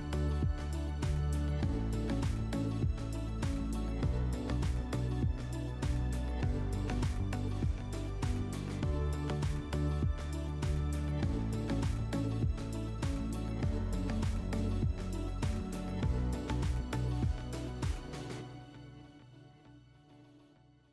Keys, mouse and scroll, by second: 0.1 click, 0.1 scroll, 0.8 scroll, 2.8-3.3 scroll, 4.5-6.1 drag, 6.3-7.8 drag, 9.3-10.8 drag, 16.4-17.9 drag, 19.4-20.9 drag.